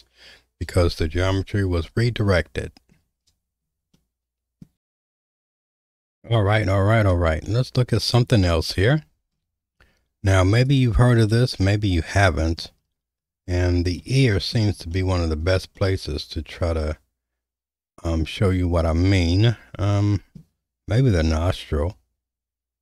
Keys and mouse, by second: 2.4 middle click, 3.9 shift+middle click, 4.7 alt+/, 7.4 middle click, 8.5 middle click, 10.6 click, 11.2-12.6 middle drag, 14.0 middle click, 14.9 shift+middle click, 15.8-19.6 middle drag.